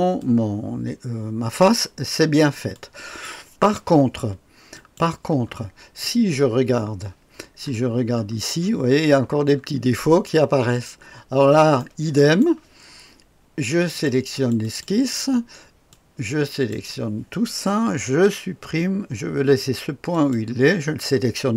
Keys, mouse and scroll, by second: 4.7 click, 7.6-10.3 scroll up 2, 11.3-11.8 scroll up 2, 11.8 right click, 13.9 click, 15.9-16.7 drag, 18.0 Delete, 20.1 click.